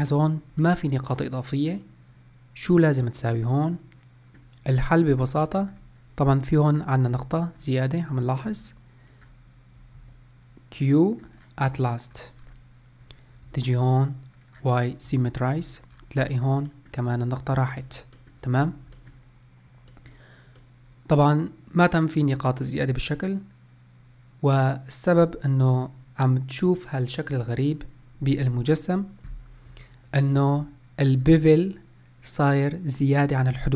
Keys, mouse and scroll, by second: 5.5 scroll up 1, 6.2 click, 6.8-7.3 scroll down 2, 7.3-8.8 scroll up 1, 8.8 shift+click, 9.7 q, 11.4-11.9 scroll down 1, 11.9 scroll up 3, 12.2 scroll down 2, 13.2 Tab, 14.1-14.8 drag, 14.8 Tab, 15.3-15.7 scroll up 3, 15.7-16.1 scroll down 2, 16.1-18.3 shift+middle drag, 18.3-18.7 scroll up 1, 18.7-23.5 shift+middle drag, 29.3 Tab.